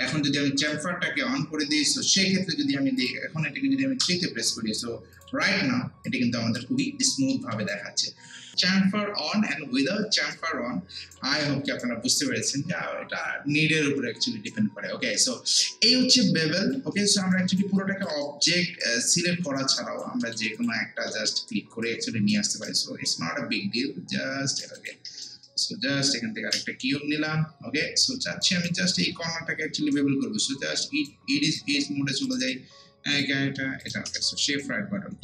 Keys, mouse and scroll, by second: 0.6 click, 2.4 scroll down 1, 2.6 scroll up 1, 3.0 click, 4.0 3, 4.4 scroll down 1, 4.7 scroll up 1, 5.2 click, 5.5 scroll down 1, 5.7 scroll up 1, 6.1 alt+click, 6.8 alt+right click, 7.3 alt+middle click, 7.7 alt+right click, 10.3 alt+right click, 11.4 alt+middle click, 11.8-14.5 alt+right drag, 14.5-17.0 alt+right drag, 17.0 alt+middle click, 17.8 alt+click, 18.2 alt+right click, 18.8-20.2 alt+drag, 20.2 alt+middle click, 20.6 click, 21.1 w, 21.9 click, 22.7-24.8 shift+right drag, 24.8 click, 25.3-27.7 shift+right drag, 27.7 scroll up 1, 28.1 alt+middle click, 28.5 alt+right click, 28.9 alt+middle click, 29.9-31.5 right drag, 31.5 click, 34.6-35.2 shift+right drag.